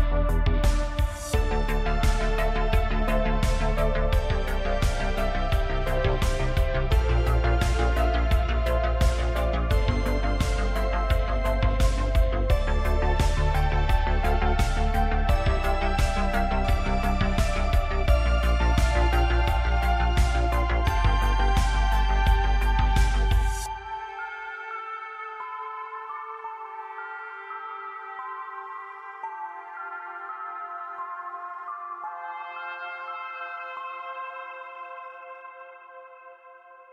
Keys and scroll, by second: 7.6 KP_Divide, 11.9 KP_Divide, 16.0 ctrl+l, 18.6 Tab, 18.9 1, 20.4 ctrl+KP_Add, 20.7 ctrl+KP_Add, 20.9 ctrl+KP_Add, 21.0 ctrl+KP_Add, 21.2 ctrl+KP_Add, 21.4 ctrl+KP_Add, 21.9 ctrl+KP_Add, 24.2 Tab, 26.8 Tab, 28.6 ctrl+KP_Add, 30.7 Tab, 35.1 Tab.